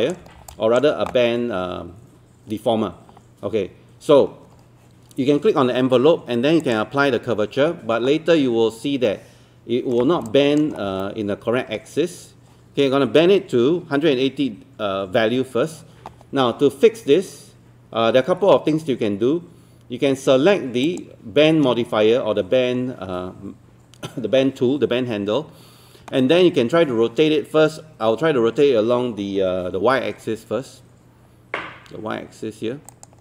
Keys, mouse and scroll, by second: 0.3 scroll down 1, 0.5 alt+click, 9.1 middle click, 10.3 alt+click, 10.8 scroll up 1, 11.0 alt+middle click, 20.9-33.2 drag.